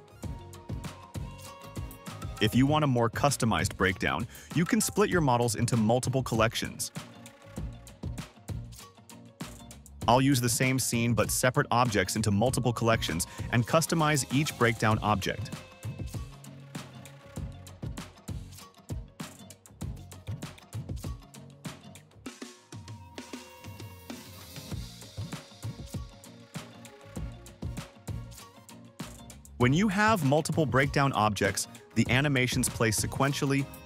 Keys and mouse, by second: 1.0-1.9 drag, 2.5 click, 2.9 drag, 3.4 click, 3.7 click, 3.8 click, 4.2 click, 5.1 space, 6.2 space, 6.6 click, 7.0 click, 7.9 click, 8.6 click, 8.8 click, 9.8-10.2 drag, 10.6 click, 11.5 click, 11.7 KP_2, 12.2 click, 13.2 click, 13.9 drag, 14.6 click, 14.9-15.2 drag, 15.4 click, 15.7 click, 16.2 click, 17.1 click, 17.6 click, 18.0 click, 18.5 space, 18.7 space, 18.9 click, 20.3 space, 28.7 space.